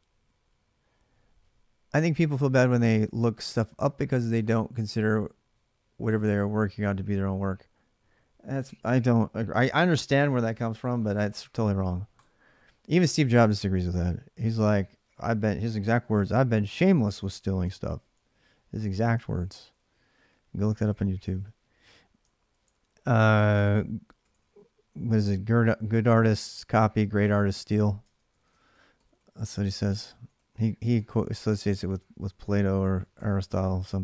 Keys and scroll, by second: 9.9-10.4 BackSpace, 13.1 alt+Tab, 13.1 BackSpace, 17.0 ctrl+a, 17.4 2, 19.0 ctrl+[, 19.0 j, 19.2 j, 22.3 ctrl+a, 22.3 j, 22.5 ctrl+a, 27.9 ctrl+[, 27.9 ctrl+a, 28.1-34.0 typing.